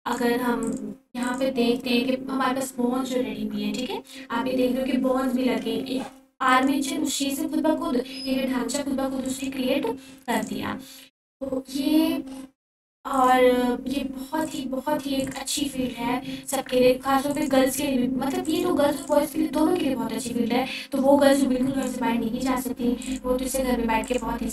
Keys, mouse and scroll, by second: 7.6 click, 10.4 click, 13.9 click, 22.5-23.1 drag.